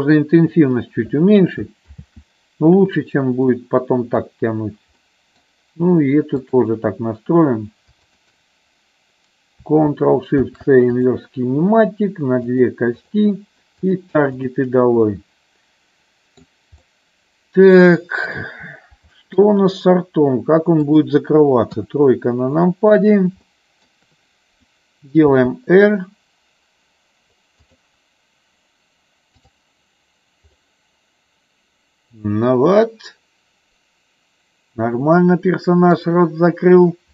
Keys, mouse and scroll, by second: 1.9 ctrl+z, 3.5 middle click, 5.0 middle click, 6.4 click, 10.4 ctrl+shift+c, 12.5 click, 12.8 click, 15.0-16.3 middle drag, 16.8-18.2 middle drag, 19.2 shift+middle click, 20.8-22.0 drag, 22.0 KP_3, 23.3 middle click, 25.2 r, 27.6 click, 29.6 click, 30.6-36.0 middle drag.